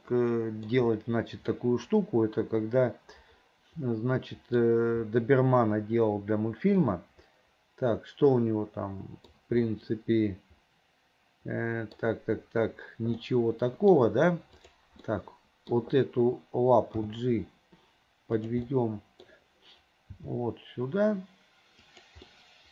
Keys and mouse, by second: 0.2 middle click, 1.8-4.7 middle drag, 7.0-9.4 middle drag, 9.8-12.1 middle drag, 13.3 middle click, 14.7 click, 15.2 middle click, 17.1 g, 18.9 click, 22.0 g, 22.5-22.7 drag.